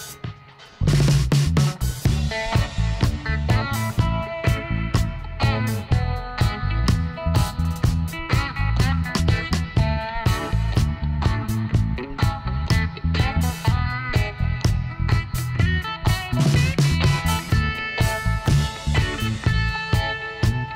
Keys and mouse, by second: 1.7 middle click, 2.7 g, 3.6-4.9 drag, 4.9 e, 6.5-8.0 drag, 7.3 right click, 8.4 click, 9.0 click, 11.9 z, 12.3-13.3 middle drag, 13.3 click, 13.5-14.9 middle drag, 15.1-16.7 drag, 15.7-16.7 right drag, 16.7 middle click, 18.3 |.